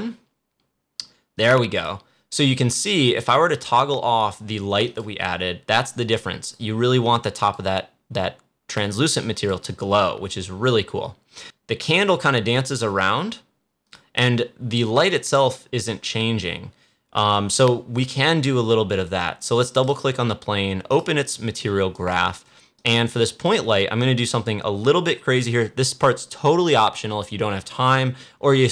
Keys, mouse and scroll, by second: 0.9-1.3 scroll up 1, 1.3-11.7 drag, 19.6 click, 21.3-26.0 drag.